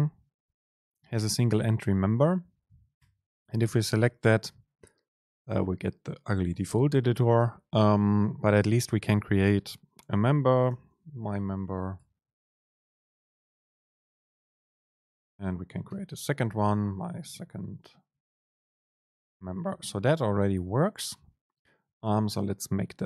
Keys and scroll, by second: 12.1 BackSpace, 14.5 Return, 15.0 super+space, 18.2 super+space.